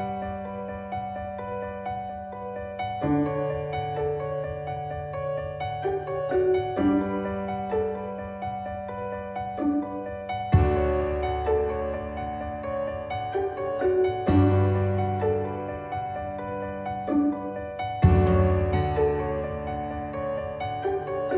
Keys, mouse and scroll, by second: 3.0 p, 3.7 click, 6.4 ctrl+z, 7.8-8.4 drag, 10.9-12.7 drag, 17.1 ctrl+q, 18.1-18.8 drag.